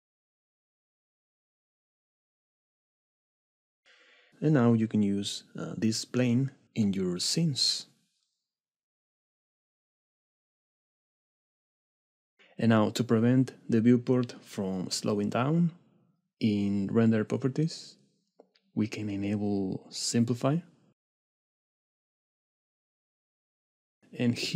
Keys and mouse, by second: 1.1 click, 2.6 click, 6.2 g, 11.2 click, 12.5 n, 13.6 middle click, 14.0 click, 14.0 right click, 19.7 right click, 23.2 right click.